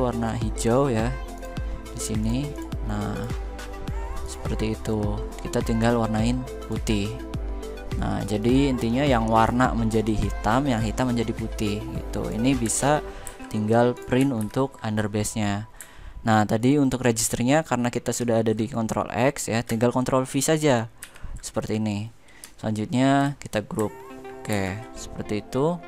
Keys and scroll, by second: 13.0 ctrl+g, 14.1 ctrl+v, 17.8 ctrl+x, 20.7 ctrl+v, 24.2 ctrl+g.